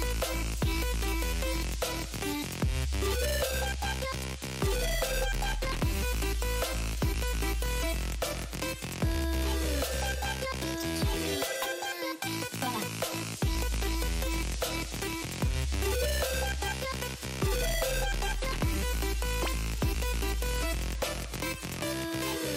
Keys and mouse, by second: 2.0 Up, 5.6 click, 6.1 ctrl+z, 7.0 click, 9.2 click, 9.8 click, 11.6 click, 12.3 click, 14.0 click, 15.0 space, 15.7 space, 16.2 space, 16.8 click, 17.7 alt+shift+click, 18.6 click, 20.3 alt+shift+click, 20.9 click.